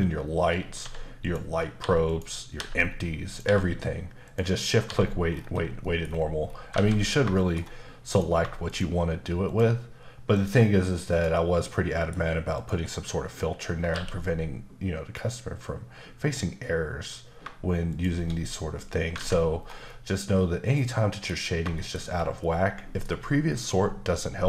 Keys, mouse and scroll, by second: 1.2 click, 1.8 h, 2.1 click, 2.5 h, 2.7-3.3 scroll down 3, 3.3 click, 3.4 h, 4.2 click, 4.8 h, 4.9-5.8 scroll up 3, 5.8 middle click, 6.1-6.5 scroll up 6, 6.7 alt+a, 7.0 scroll down 2, 7.3 shift+middle click, 8.1 click, 8.6 shift+click, 9.4 shift+double click, 10.3 shift+click, 11.1 shift+click, 11.7 shift+middle click, 12.5 shift+click, 13.9 q, 17.9 shift+click, 19.6 scroll down 1, 19.8 middle click, 21.8 middle click, 22.1 scroll down 1, 24.2 middle click.